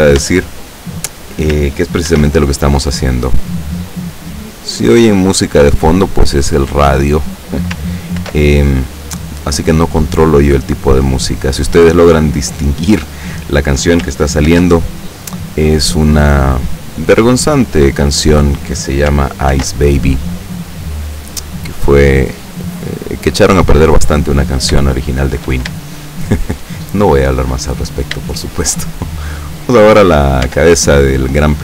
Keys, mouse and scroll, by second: 0.3 Tab, 2.2 ctrl+r, 4.0 click, 6.9 click, 8.2 ctrl+r, 9.2 click, 12.9 click, 14.6 ctrl+r, 15.6 click, 18.3 click, 19.6 ctrl+r, 20.1 click, 23.2 click, 24.3 scroll down 1, 25.0 shift+middle click, 25.9-27.7 shift+middle drag, 27.9 scroll up 1, 28.3 shift+middle click, 29.0-29.4 scroll up 1, 29.5 middle click, 30.5 Tab, 30.9 right click.